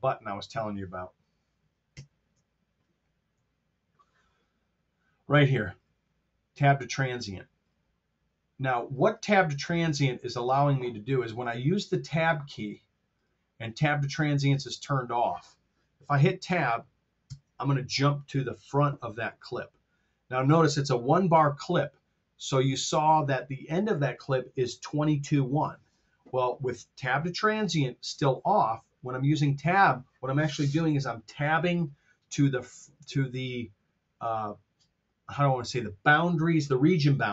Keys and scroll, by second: 1.8 ctrl+super+Down, 3.4 t, 17.2 Tab.